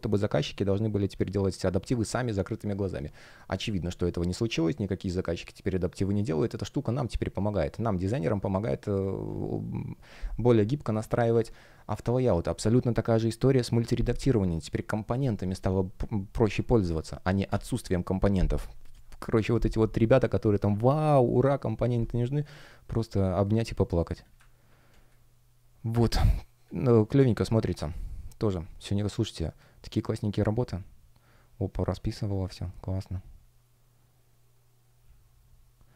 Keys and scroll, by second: 11.2 Delete, 23.5 space, 24.8 space.